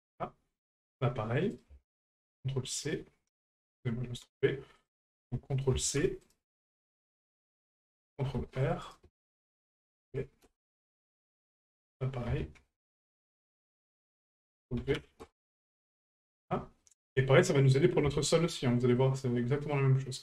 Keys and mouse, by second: 0.6 right click, 1.6-6.4 ctrl+drag, 7.7 right click, 9.5-10.5 ctrl+drag, 11.2 right click, 14.2-15.3 drag, 16.1 shift+middle click, 16.8 middle click, 18.2 shift+middle click, 19.0 middle click.